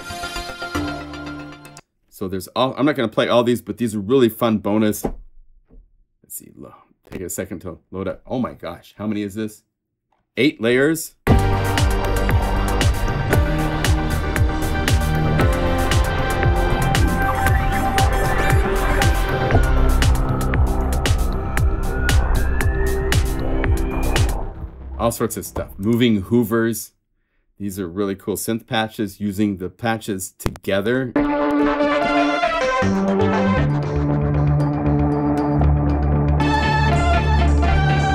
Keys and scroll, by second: 15.3 F1, 15.3 F2, 19.0 F4, 32.0 F4, 36.8 F4, 37.5 F4.